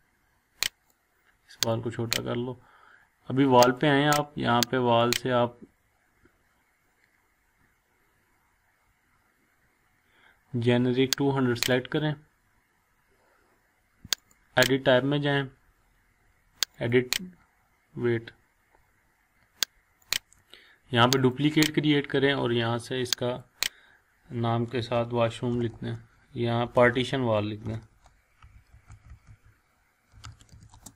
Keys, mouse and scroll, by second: 12.9 click, 14.2 click, 16.7 click, 20.0 click, 24.8-30.9 typing.